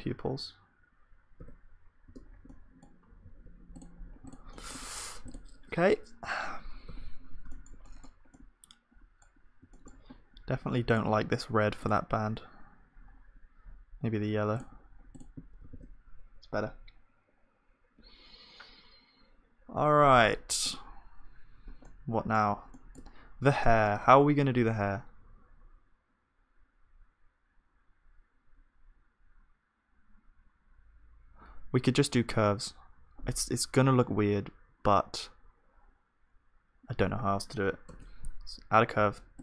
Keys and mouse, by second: 1.4 ctrl+s, 2.1 Tab, 2.3-15.7 middle drag, 3.2 z, 4.5-6.8 drag, 4.5-6.8 right drag, 4.7 Tab, 6.9 z, 15.7 ctrl+s, 15.7-17.1 drag, 20.9-22.7 drag, 22.7-37.9 middle drag, 37.9 shift+a.